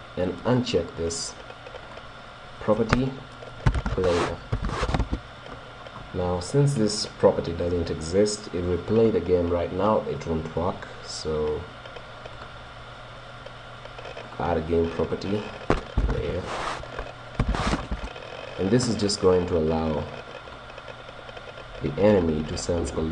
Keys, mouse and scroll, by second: 1.8-3.8 drag, 10.2 right click, 12.3-14.1 drag, 14.3-16.8 drag, 19.4-21.2 drag, 22.2 right click.